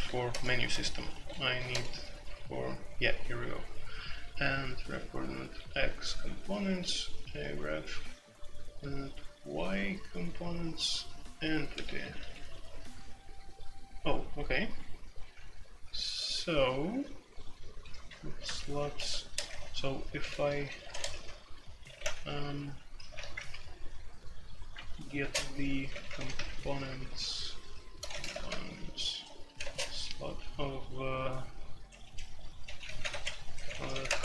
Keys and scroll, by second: 0.0-1.7 typing, 3.3-7.4 typing, 9.4-11.0 typing, 12.1-18.1 typing, 18.3 alt+2, 18.9 Escape, 19.2-23.3 typing, 24.7-26.7 typing, 27.9-29.6 typing, 32.0-34.2 typing.